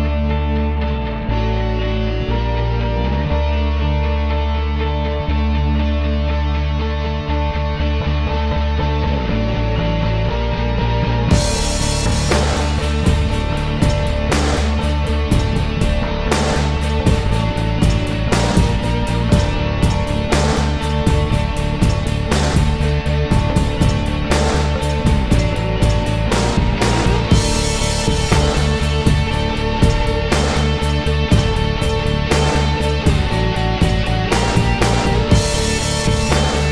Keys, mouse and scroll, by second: 2.3 typing, 3.4 typing, 4.1 click, 5.8 [, 8.4 [, 8.5 ctrl+z, 10.4 ctrl+z, 10.9 ctrl+s, 18.1 ctrl+s, 19.9 click, 20.0 ctrl+s, 23.0 e, 23.7 click, 25.4 click, 25.5 ctrl+s, 26.4 z, 26.6 click, 27.4 b, 28.6-29.1 typing, 34.7-35.0 typing.